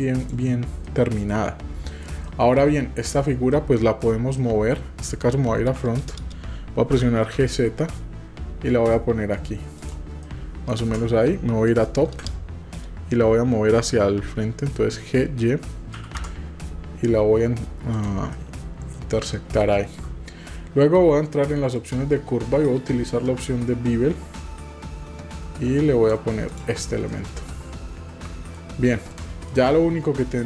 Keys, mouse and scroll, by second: 0.8-1.3 middle drag, 1.9 shift+middle click, 2.2-2.6 shift+middle drag, 3.5 shift+middle click, 4.4 middle click, 6.9 g, 10.2 right drag, 10.4 middle click, 10.7 scroll down 1, 10.9 p, 10.9 ;, 16.0 g, 18.3 middle click, 19.6 shift+middle click, 21.8 click, 24.4-26.2 drag, 26.6 drag, 27.1-28.5 middle drag, 29.1 click, 29.5-30.4 middle drag.